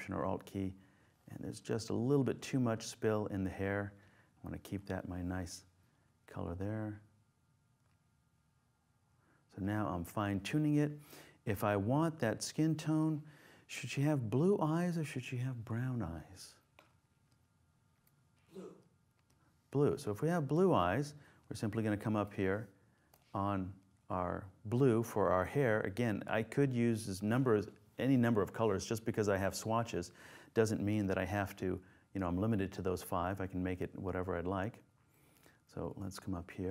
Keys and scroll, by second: 31.2 super+space.